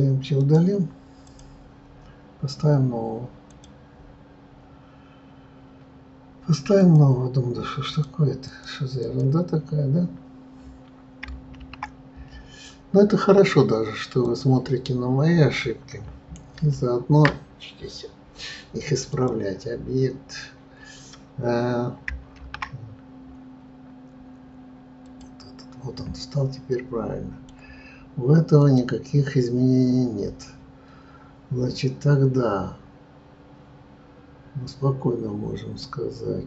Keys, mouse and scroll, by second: 1.2-3.5 right drag, 3.5 click, 14.2 shift+a, 16.6 ctrl+z, 25.1 shift+a, 26.7-28.7 middle drag, 28.7 click.